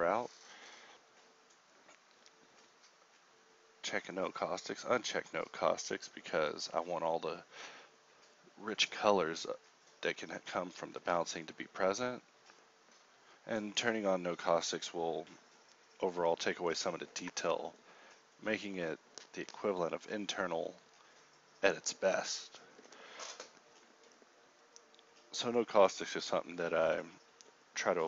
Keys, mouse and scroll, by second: 3.9 ctrl+Up.